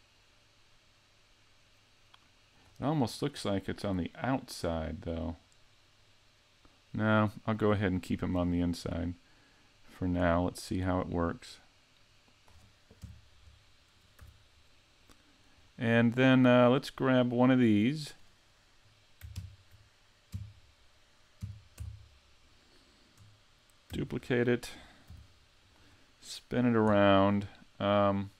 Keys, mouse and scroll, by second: 3.1-3.4 scroll up 2, 3.4 middle click, 6.9 middle click, 7.9 shift+middle click, 8.4-9.0 scroll up 4, 8.9 middle click, 10.9 click, 13.0 KP_Decimal, 13.7-14.1 scroll down 2, 14.2 z, 14.5 middle click, 15.6-16.2 scroll up 2, 16.9 right click, 17.7 middle click, 19.3 ctrl+KP_3, 20.3 KP_5, 21.4 KP_5, 21.8 z, 23.9 shift+d, 24.4 click, 25.1 g, 25.7 click.